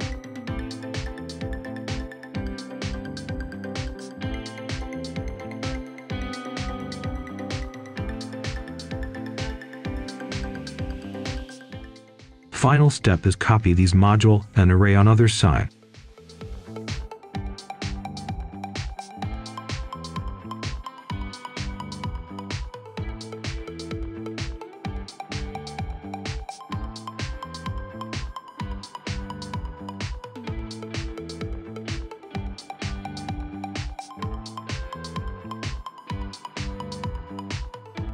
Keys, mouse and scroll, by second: 1.3 scroll up 1, 1.7 right click, 3.7 click, 4.7 right click, 5.5 Tab, 7.5-8.3 scroll down 2, 8.3-9.2 scroll up 1, 9.2 click, 9.5 scroll down 1, 9.7 right click, 11.1 shift+click, 11.7 shift+click, 12.9 shift+click, 13.3 shift+click, 14.1 scroll down 1, 14.4 right click, 15.7 alt+click, 16.7 right click, 17.4 scroll down 1, 17.5 scroll up 1, 17.8 right click, 18.7-20.3 drag, 21.6 click, 22.3 scroll down 1, 22.5-23.3 scroll up 1, 23.9-27.1 drag, 27.3-28.4 scroll up 1, 28.4 Tab, 29.0-30.0 typing, 31.2 click, 31.4-31.8 scroll down 1, 31.8-33.7 scroll up 1, 33.7 click, 34.1-34.5 scroll down 1, 34.9 right click, 35.4-35.7 scroll down 1, 35.7-36.0 scroll up 1, 36.0 right click, 36.5 shift+a.